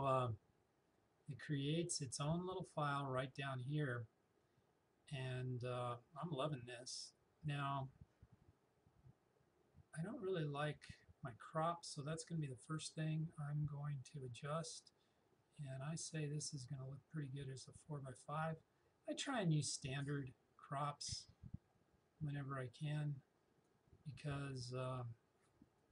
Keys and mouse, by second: 12.4-25.7 drag, 25.7 Escape.